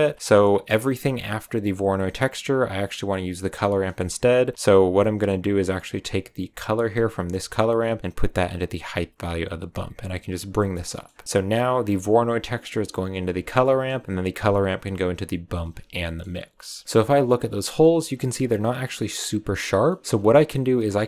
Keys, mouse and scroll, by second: 0.0 click, 0.2-0.7 middle drag, 0.7-1.7 scroll up 2, 1.7 click, 3.1 click, 3.5 scroll up 1, 3.8 middle drag, 4.1 click, 7.4 click, 9.6 click, 10.5 middle click, 10.7 scroll down 3, 10.8 middle click, 11.0 scroll up 2, 11.7 click, 13.1 click, 13.5-16.2 middle drag, 16.2 scroll up 2, 16.5 middle click, 17.6 scroll up 1, 17.7-20.0 shift+middle drag, 20.0-21.0 scroll up 3.